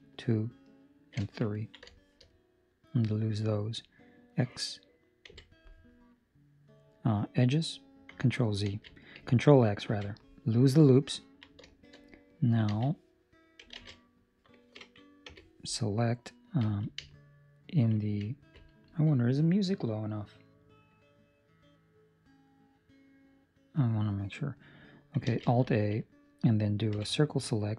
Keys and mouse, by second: 1.1 alt+shift+right click, 1.5 ctrl+middle click, 1.8 shift+middle click, 2.3 middle click, 5.2 x, 8.7 ctrl+z, 9.9 ctrl+x, 11.1 ctrl+middle click, 11.6 shift+middle click, 11.9 middle click, 12.6 z, 13.7 alt+a, 15.2 c, 25.3 alt+a, 25.6 Escape, 26.9 c.